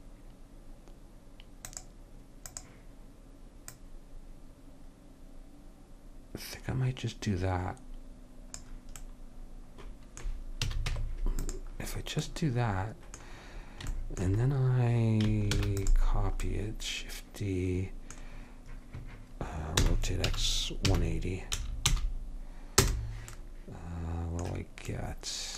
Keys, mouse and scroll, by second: 1.7-5.7 drag, 9.1-10.4 middle drag, 10.8 a, 11.0 Tab, 15.6 shift+d, 19.9 r.